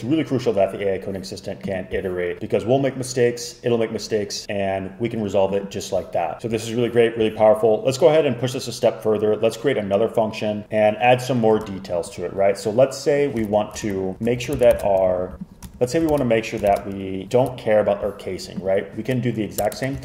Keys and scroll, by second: 13.6 super+Right, 13.9 shift+Up, 14.1 Down, 14.4 shift+Up, 14.6 shift+Up, 14.8 shift+super+Left, 15.8 shift+Up, 16.0 shift+Up, 16.2 shift+super+Left, 16.8 shift+super+Left, 19.7 Return, 19.8 Return.